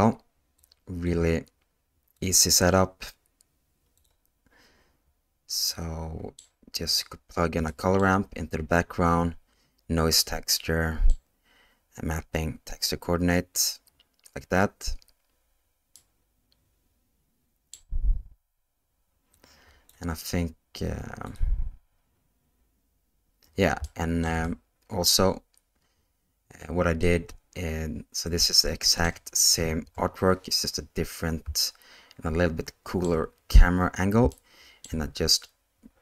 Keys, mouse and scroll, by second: 0.6 click, 2.2-4.1 drag, 5.8 middle click, 7.8 middle click, 10.6 middle click, 15.9-17.7 middle drag, 19.3 click, 21.3 click, 23.9-24.2 shift+middle drag, 24.4-25.0 middle drag, 27.0-29.0 middle drag, 29.8 KP_0, 31.6-33.0 shift+middle drag, 34.3-34.8 shift+middle drag.